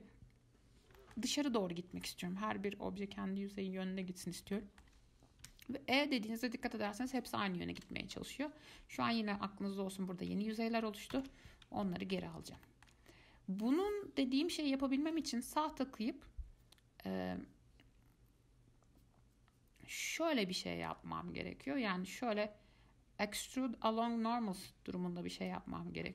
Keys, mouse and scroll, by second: 4.2 scroll up 1, 4.8 shift+middle click, 5.1 scroll down 2, 5.6 e, 9.7 scroll up 1, 11.3 ctrl+z, 12.1-15.3 shift+middle drag, 15.3-21.9 right drag, 21.9-24.9 drag, 25.7 click.